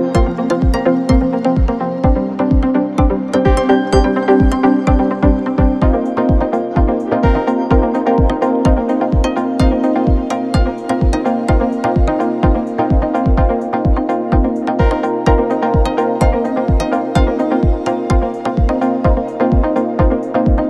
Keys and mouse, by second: 10.0 shift+d, 11.0 shift+d, 13.2 shift+middle click, 13.9-18.9 drag, 18.9-20.6 middle drag.